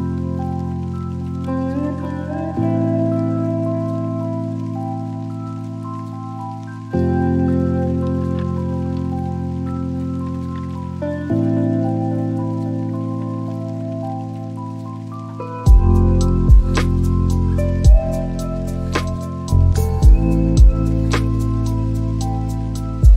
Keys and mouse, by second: 2.2 click, 6.3-8.9 drag, 13.8 n, 16.4-20.8 drag, 23.0 drag.